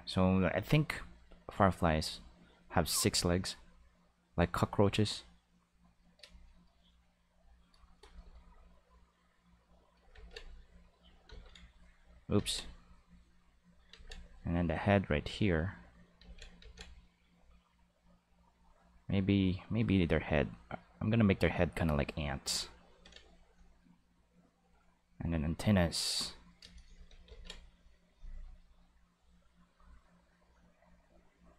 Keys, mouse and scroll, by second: 0.1 click, 0.7 click, 1.2 click, 2.2 click, 3.0-5.7 drag, 9.0 click, 10.1 ctrl+z, 10.5 click, 11.2 ctrl+z, 11.4 ctrl+click, 12.3 ctrl+z, 12.8 click, 13.9 ctrl+z, 14.2 click, 14.9 click, 16.2 ctrl+z, 16.6 ctrl+z, 17.0 click, 18.5 click, 20.2-21.2 drag, 21.8 click, 24.2 click, 25.6 click, 27.2 ctrl+z, 29.6 click.